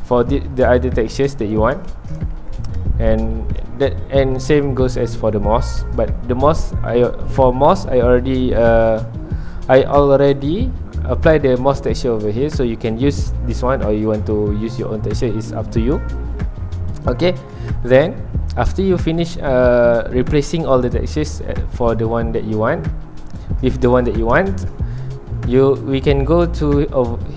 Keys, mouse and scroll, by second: 3.5 shift+middle click, 3.7 scroll up 1.